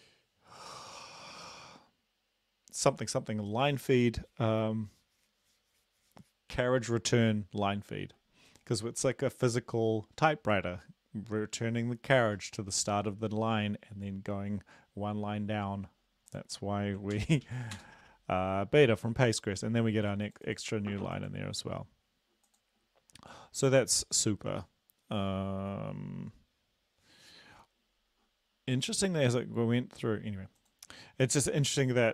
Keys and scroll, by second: 17.1 ctrl+l, 17.5 Up, 17.8 Return.